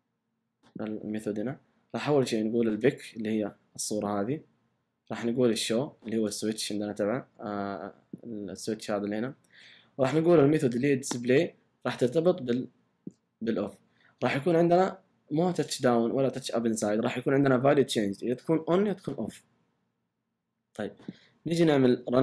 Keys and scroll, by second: 1.1 typing.